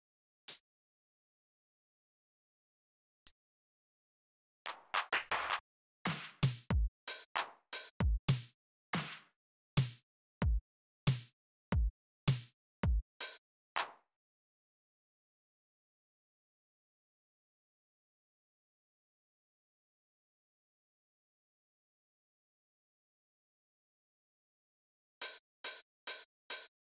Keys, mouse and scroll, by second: 0.2 Up, 7.5 Down, 8.7 Down, 9.4 Up, 10.1 Up, 11.5-12.0 scroll up 2, 12.0-12.5 scroll down 2, 12.5-14.1 scroll up 2, 14.3 click, 15.0 click, 15.6-17.6 scroll down 2, 18.5 click, 21.1 click, 23.0 right click, 23.7 click, 24.7 click.